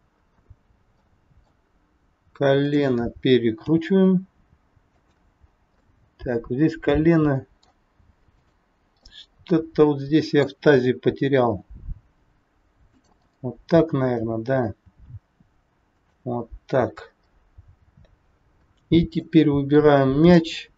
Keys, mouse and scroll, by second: 0.2 scroll down 2, 1.1 middle click, 2.7 click, 3.5 g, 5.3-5.8 scroll up 3, 5.8 middle click, 8.3 click, 8.9 middle click, 11.4 r, 13.3 middle click, 14.9 r, 16.8-17.9 scroll down 4, 18.2 scroll up 3, 18.7 middle click, 20.0 click.